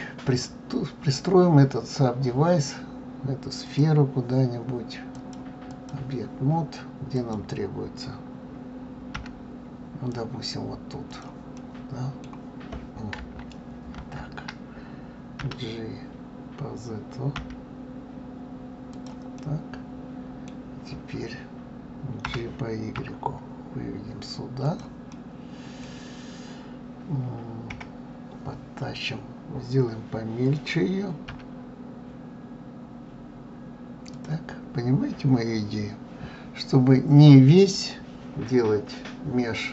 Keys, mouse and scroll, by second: 3.6 click, 5.1-7.3 drag, 9.1 g, 11.6-14.0 middle drag, 14.0 ctrl+z, 19.3-22.2 middle drag, 22.2 g, 25.1-27.7 middle drag, 27.7 KP_1.